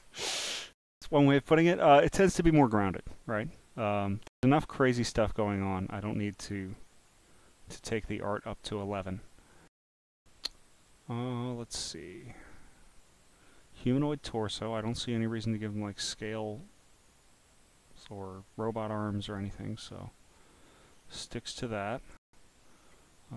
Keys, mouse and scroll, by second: 1.5 scroll, 1.9 click, 3.0 scroll, 3.0 scroll, 3.1 scroll, 6.6 click, 8.6 click, 19.1 click, 19.9-20.5 scroll, 22.1 click.